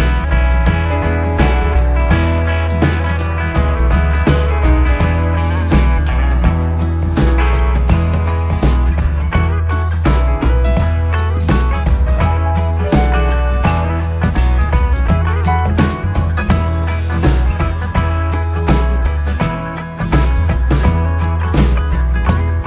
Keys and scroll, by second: 1.3 Down, 16.8 ctrl+z, 18.8 ctrl+z, 22.2 ctrl+c, 22.3 ctrl+v.